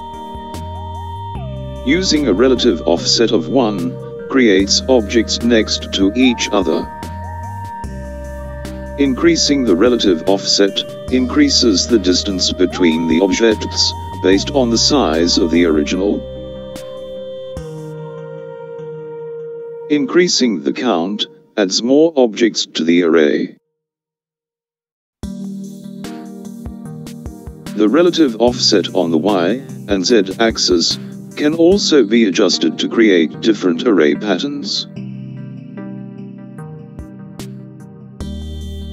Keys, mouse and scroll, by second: 13.4 click, 21.1 click, 29.0 click, 31.1 click, 33.0-33.5 middle drag, 33.5 scroll down 2, 33.7-34.9 middle drag, 35.3 KP_7, 36.9 click.